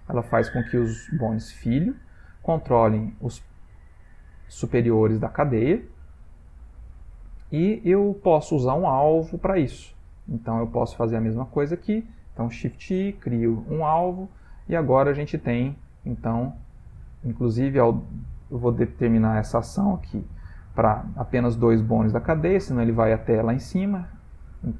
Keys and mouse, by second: 11.5 click, 12.9 shift+i, 15.1 click, 15.6 g, 17.1 click, 19.4 click, 20.1 click, 22.2-22.6 shift+middle click, 23.8 shift+middle click, 24.1 shift+middle click.